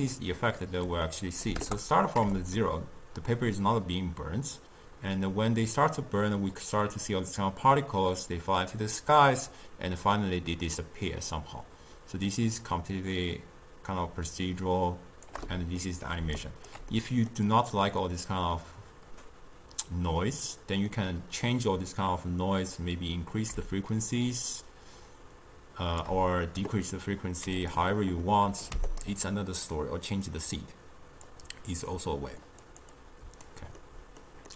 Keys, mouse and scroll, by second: 0.9-5.5 drag, 15.9 middle click, 16.3 d, 16.5 right click, 16.8 d, 17.1-20.1 middle drag, 21.0-23.7 middle drag, 23.7-26.8 shift+drag, 27.7 click, 30.4-32.9 drag, 33.1 click, 33.9-34.5 middle drag.